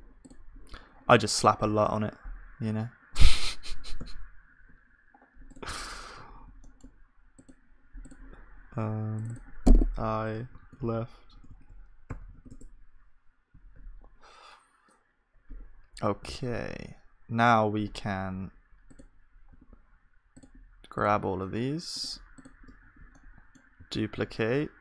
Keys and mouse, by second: 4.1 z, 11.5 BackSpace, 16.3 z, 22.8 click, 23.8 shift+d.